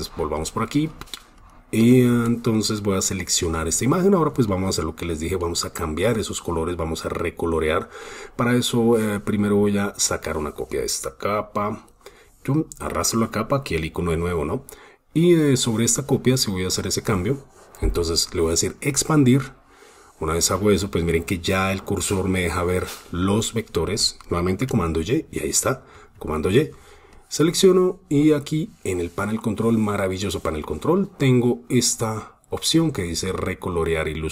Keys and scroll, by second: 3.7 super+space, 24.4 super+y, 25.8 super+y.